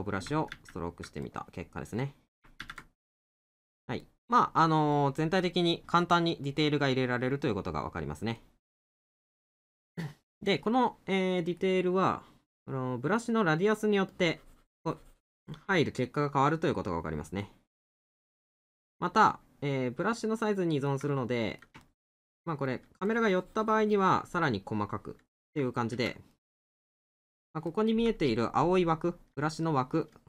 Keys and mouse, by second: 1.3 middle click, 4.0 middle click, 8.4 middle click, 11.4 right click, 15.8 middle click, 19.3 middle click, 21.1 middle click, 24.4 middle click, 26.4 middle click, 29.6 middle click.